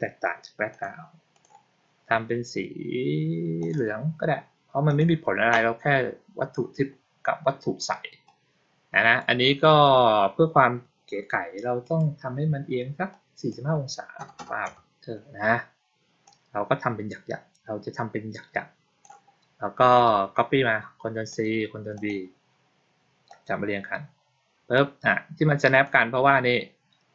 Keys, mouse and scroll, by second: 0.6 click, 1.2 click, 3.5 click, 4.7 click, 8.1-9.1 drag, 11.7 click, 13.0 click, 16.1-18.9 drag, 21.2 click, 21.8 click, 23.1-25.7 drag.